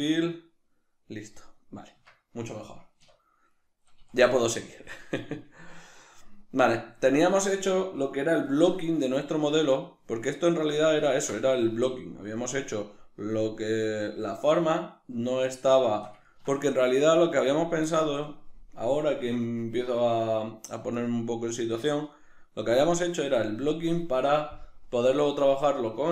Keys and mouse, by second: 2.0 Tab, 3.0 \, 4.0 a, 10.7-11.1 right drag, 11.1-20.9 ctrl+middle drag, 11.4 Tab, 20.9-26.1 right drag.